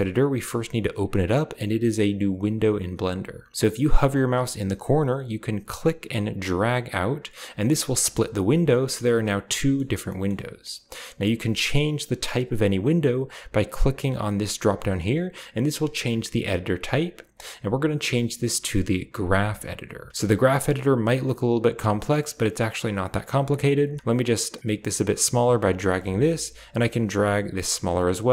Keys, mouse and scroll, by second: 5.6-7.8 drag, 9.6 middle drag, 10.1 middle click, 11.0-14.2 middle drag, 14.2 click, 19.0 click, 20.1 scroll up 1, 24.4-25.4 drag, 26.6-27.9 drag.